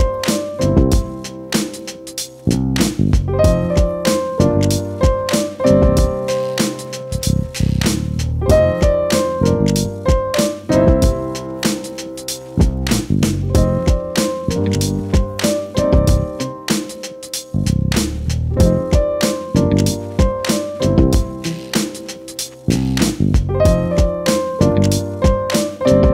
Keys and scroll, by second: 0.0 ctrl+z, 0.7 ctrl+z, 4.5 ctrl+-, 6.5 ctrl+=.